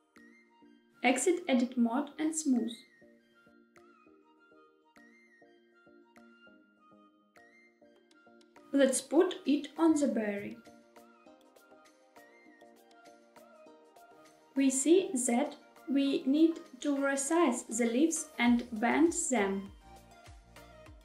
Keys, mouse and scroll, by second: 1.8 Tab, 2.6-3.1 middle drag, 3.6 right click, 5.2 click, 7.1 click, 8.5 shift+middle click, 8.5 scroll down 1, 8.9 g, 10.1 z, 13.7 click, 14.1 Tab, 14.3 middle click, 14.5 scroll up 1, 14.6 shift+middle click, 15.1 2, 15.3 click, 15.4 shift+middle click, 15.9 shift+click, 15.9 middle click, 16.4 shift+click, 16.6 middle click, 16.7 middle click, 17.0 shift+click, 17.1 shift+click, 17.1 middle click, 17.3 shift+middle click, 17.9 click, 18.6 s, 19.3 click, 19.6 g, 19.8 z, 20.3 click, 20.3 middle click, 20.6 scroll down 2, 20.7 middle click.